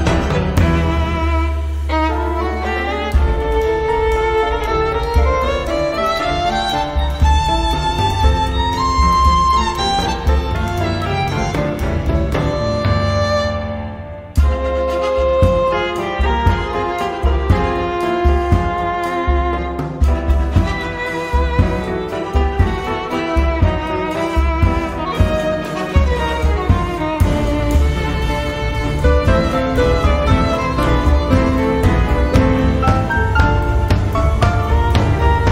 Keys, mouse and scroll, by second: 0.6 -, 1.8 6, 2.4 click, 3.6 0, 4.8 click, 6.9 click, 7.9 0, 10.2 click, 15.6 click, 17.4 click, 19.1 click, 20.1-21.1 typing, 21.2 click, 22.2 0, 23.8 click, 29.8 click, 30.8 middle click, 30.8 -, 32.2 click, 35.1 click.